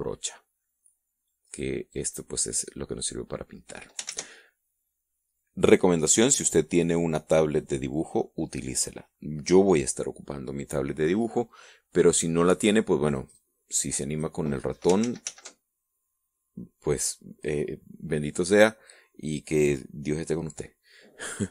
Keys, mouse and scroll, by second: 2.2-3.6 drag, 4.4 ctrl+z, 13.5-14.7 drag, 15.4 ctrl+z.